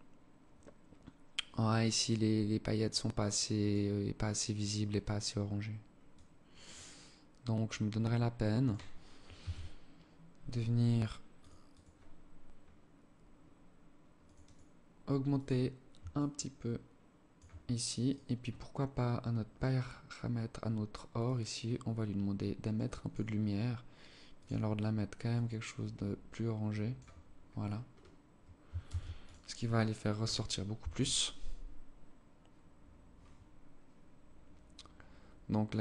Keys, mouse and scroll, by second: 11.0 click, 13.5 click, 15.6 shift+click, 17.5 right click, 19.2 scroll down 3, 20.5 click, 22.7-23.6 scroll down 5, 23.6 click, 27.0-28.1 scroll up 19, 28.1 ctrl+s.